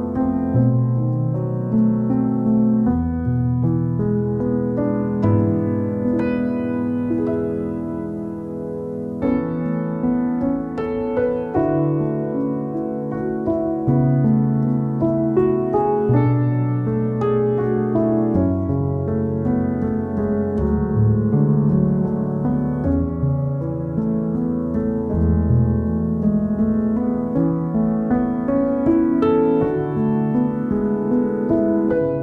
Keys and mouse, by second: 0.6-1.9 typing, 3.3 n, 4.0 click, 5.0 s, 5.9 alt+middle click, 6.6 ctrl+r, 7.0 alt+middle click, 7.7 ctrl+r, 8.2 ctrl+r, 8.5-9.7 middle drag, 10.0 KP_1, 10.7 1, 11.0 g, 13.1-22.4 typing, 14.2 click, 14.6 click, 14.9 click, 15.5 click, 17.3 click, 21.8 click, 22.3 click, 23.2 alt+middle click, 23.7 middle click, 24.4 g, 25.0 alt+middle click, 26.0 shift+middle click, 26.2 alt+middle click, 26.4-27.3 ctrl+z, 27.5 alt+middle click, 28.5-32.2 typing, 29.4 click, 31.4 click, 31.8 middle click, 32.1 alt+middle click.